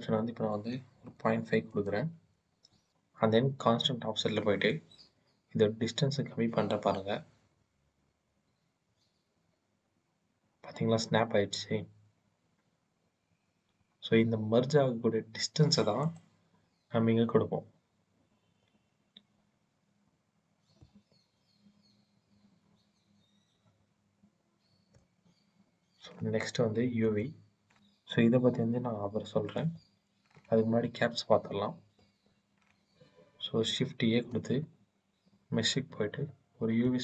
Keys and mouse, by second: 4.6-15.9 drag, 20.7-24.8 drag, 26.9-29.7 drag, 33.8 shift+a.